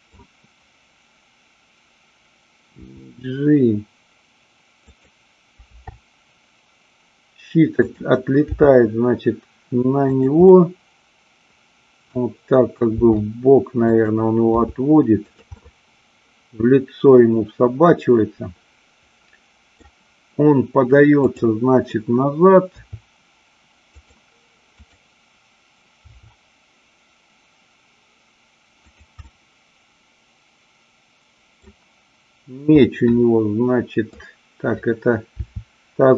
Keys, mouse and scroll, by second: 2.9 g, 4.9 click, 5.6 r, 7.7 click, 8.5 g, 10.1 click, 10.4-12.3 middle drag, 12.9 r, 13.9 click, 14.5 g, 15.4 click, 15.6-19.7 middle drag, 22.7 r, 23.9 click, 24.9-25.9 drag, 26.0 r, 28.9 click, 29.3-31.6 middle drag, 32.7-34.1 middle drag, 35.3 r.